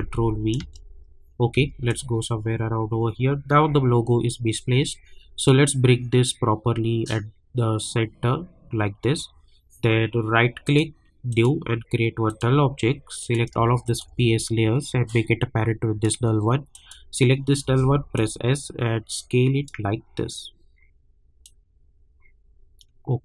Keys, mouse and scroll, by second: 0.6 space, 1.9-10.6 drag, 10.6 right click, 11.3 click, 12.3 click, 13.8 shift+click, 15.0-16.7 drag, 17.6 s, 18.1-23.2 drag.